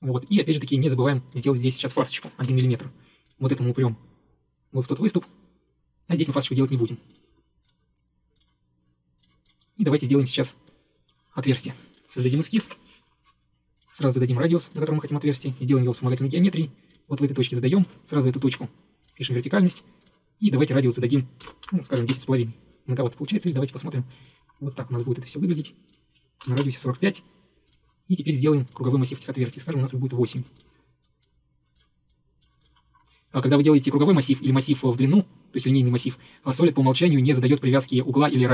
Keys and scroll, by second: 2.3 typing, 2.5 Return, 12.7 ctrl+8, 16.1 Escape, 17.4 Escape, 17.5 Escape, 21.5-22.3 typing, 23.3 Escape, 26.3-27.2 typing.